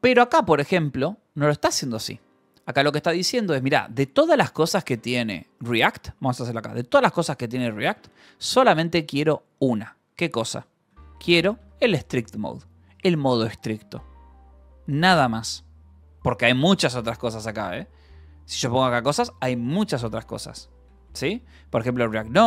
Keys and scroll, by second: 0.0-0.8 typing, 2.6 l, 3.9-6.5 typing, 7.9 Escape, 11.1 s, 11.5 v, 12.0 e, 16.0 Escape, 16.6-19.5 typing, 21.2 t, 21.7 Return.